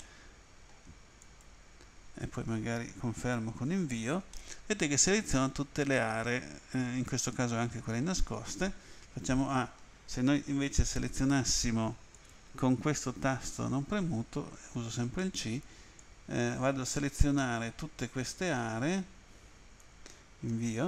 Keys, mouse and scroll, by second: 0.0 middle click, 1.3 click, 3.6 Return, 4.4 middle click, 9.3 a, 10.4 End, 12.2 click, 14.8 c, 16.0 click, 20.5 Return.